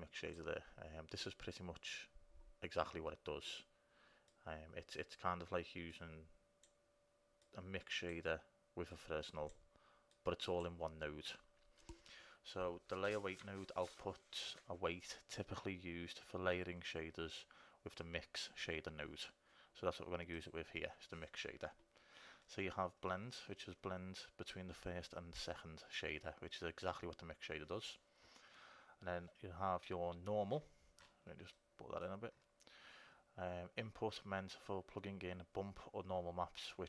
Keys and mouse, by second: 0.0-3.3 drag, 4.5-12.3 drag, 20.6-22.4 drag, 31.6 middle click.